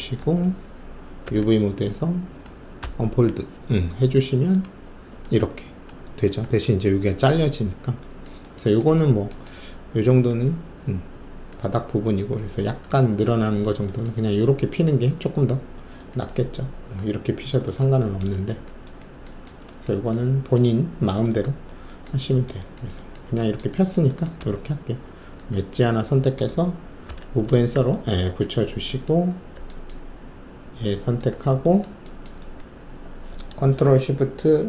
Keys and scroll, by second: 0.2 alt+w, 1.2 alt+4, 2.8 d, 24.4 alt+2, 27.0 shift+v.